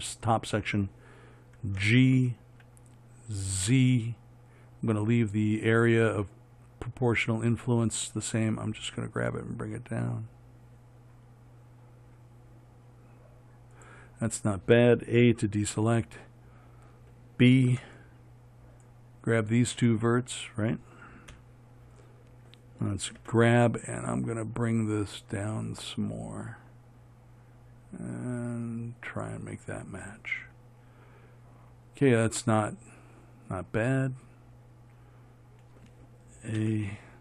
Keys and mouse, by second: 2.0 g, 15.5 a, 18.0 b, 21.6 KP_1, 23.5 g, 36.9 a.